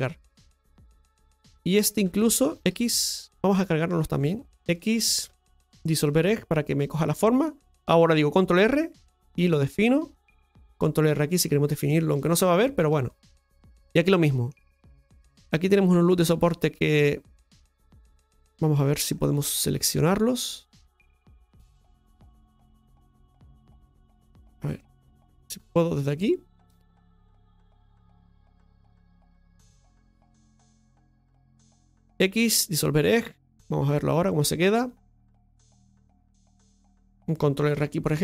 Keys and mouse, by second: 0.4 x, 1.7 right click, 2.1 alt+shift+right click, 4.1-5.2 alt+shift+right drag, 6.0 x, 12.9 middle click, 14.2 middle click, 16.2-17.8 right drag, 18.5 middle click, 20.9 click, 21.8 right click, 22.4 right click, 22.8 right click, 23.4 alt+shift+right click, 23.8 alt+shift+right click, 24.6 right click, 25.6 right click, 25.9 alt+shift+right click, 26.1 alt+shift+right click, 26.9 right click, 27.3 alt+shift+right click, 27.5 alt+shift+right click, 28.0 alt+shift+right click, 28.5 right click, 28.9 alt+shift+right click, 29.7 right click, 30.5 right click, 30.9 alt+shift+right click, 32.7 x, 33.8 click, 35.7 right click.